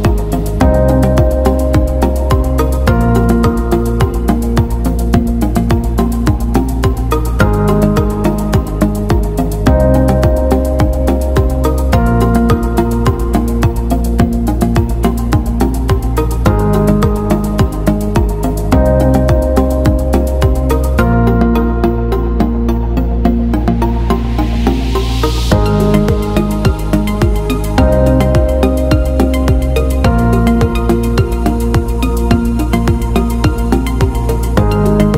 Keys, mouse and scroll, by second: 20.6 alt+scroll up 1, 22.0 click, 26.2 shift+click, 29.0 click, 31.8 click, 32.7 a, 34.0 click.